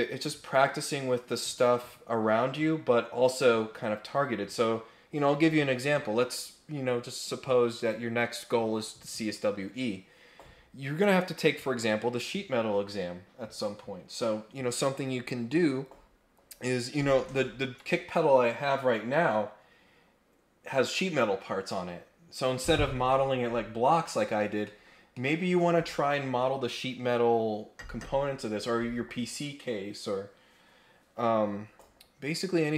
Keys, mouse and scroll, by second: 23.8 scroll up 1, 24.4 scroll up 1, 24.6 middle click, 24.7-25.1 scroll down 2, 25.1 middle click.